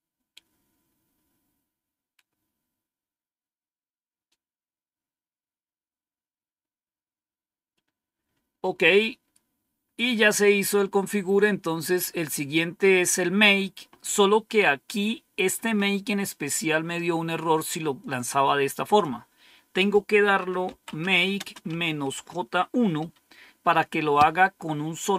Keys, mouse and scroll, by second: 10.4-11.6 scroll down 1, 11.6-13.0 scroll down 1, 13.0-13.6 scroll down 1, 18.7 click, 20.3-22.9 typing.